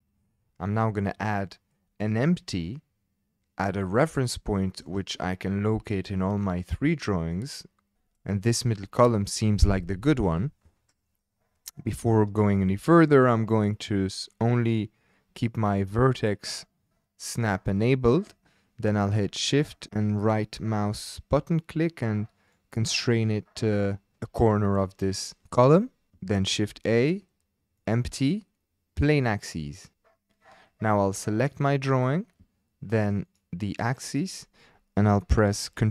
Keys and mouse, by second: 0.0 o, 1.3 shift+click, 2.8 shift+click, 4.5-4.9 shift+drag, 6.9-7.3 shift+drag, 12.5-17.3 drag, 19.6 shift+click, 26.5 shift+a, 33.2 shift+click.